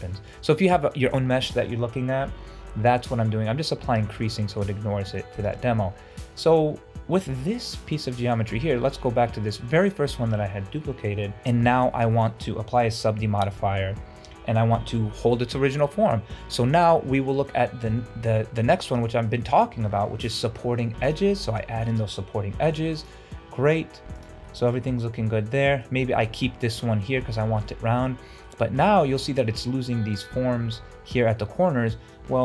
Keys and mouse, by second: 0.1 shift+middle click, 4.1 Tab, 4.5 shift+middle drag, 5.1 shift+middle click, 6.2 middle click, 7.7-8.1 middle drag, 8.3 shift+middle drag, 12.0 middle click, 12.3 shift+middle click, 13.2 ctrl+2, 18.0 Tab, 19.0 middle click, 19.5 shift+middle click, 20.8 ctrl+r, 22.6 ctrl+r, 24.5-25.6 middle drag, 25.7 shift+middle click, 27.5 shift+middle click, 27.9 middle click, 28.7 shift+middle click, 29.2 middle click.